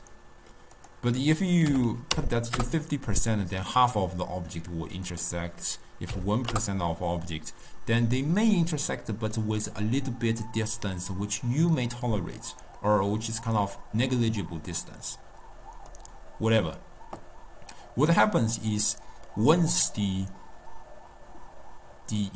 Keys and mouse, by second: 0.9-3.9 drag, 5.2-8.3 drag, 8.7-11.8 middle drag, 12.9-16.0 middle drag.